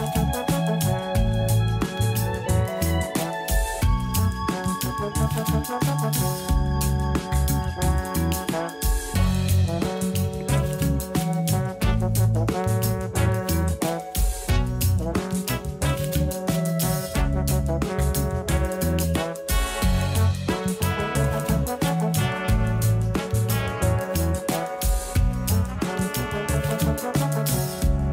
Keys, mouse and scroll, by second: 2.6-3.2 scroll up 5, 3.2-3.8 shift+middle drag, 3.8-5.6 scroll up 2, 5.6-6.7 scroll up 1, 6.7 click, 7.1-10.2 drag, 12.0 a, 12.2 a, 15.2-16.1 shift+middle drag, 16.1 click, 18.8 ctrl+t, 19.2-20.9 scroll down 18, 21.4 drag, 22.7-23.1 scroll up 5, 23.5-25.6 drag, 25.9-26.8 scroll up 7, 26.8 click.